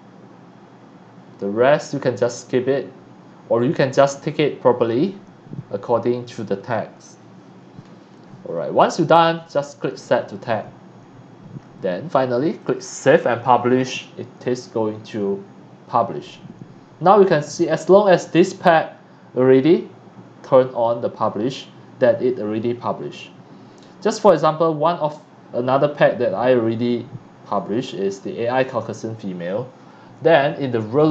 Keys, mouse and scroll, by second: 0.7 middle click, 0.7 scroll down 1, 1.9 middle click, 1.9-3.4 scroll down 2, 2.3-3.4 middle drag, 5.6-7.6 middle drag, 5.6-7.5 scroll up 1, 7.5-8.0 scroll down 2, 9.5 click, 11.6-12.6 scroll down 1, 12.6 click.